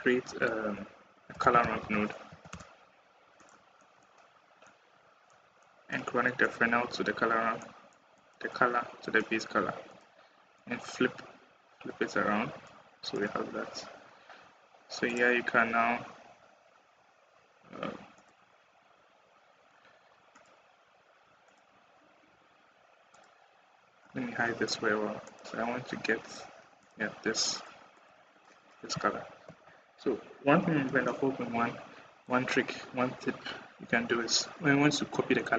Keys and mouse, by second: 9.8-10.8 drag, 12.5 click, 19.3 click, 20.2 click, 27.4 click, 27.8 click.